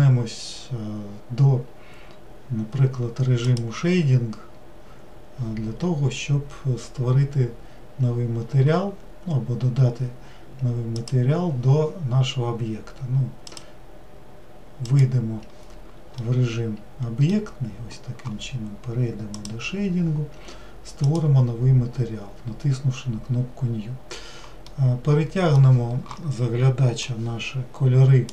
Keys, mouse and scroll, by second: 11.0 click, 16.2-28.3 middle drag.